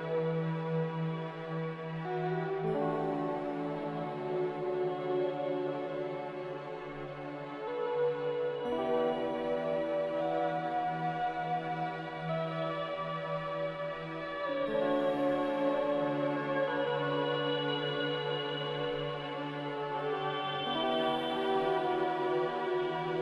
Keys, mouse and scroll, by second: 0.0-1.3 typing, 2.5 z, 9.3 Delete, 14.0-14.8 typing, 23.0 Delete.